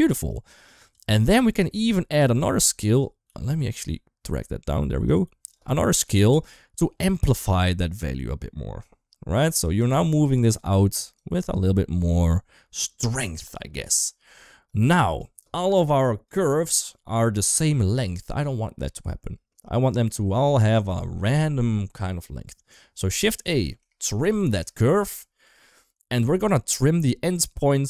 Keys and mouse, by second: 0.2 click, 2.1 click, 2.7 click, 3.1 g, 5.3 click, 5.6 shift+middle click, 5.9 shift+d, 7.3-9.6 shift+drag, 9.9 middle click, 11.0-13.0 shift+drag, 14.5 click, 15.3 click, 16.9 middle click, 17.7 middle click, 20.3 shift+middle click, 23.3 shift+a.